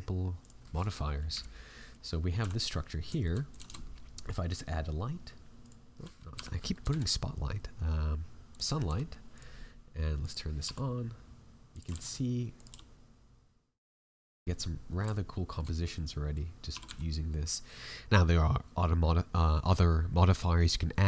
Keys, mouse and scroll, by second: 0.7 right click, 1.3 KP_Decimal, 1.7 middle click, 2.4 a, 2.5 middle click, 3.1 shift+middle click, 3.4 click, 3.6 shift+a, 6.3 Delete, 6.8 shift+a, 8.8 r, 10.2 click, 10.6 r, 14.2 scroll up 7, 14.5 middle click, 15.1 shift+middle click, 15.7-16.0 scroll down 2, 15.9 middle click, 16.7 r.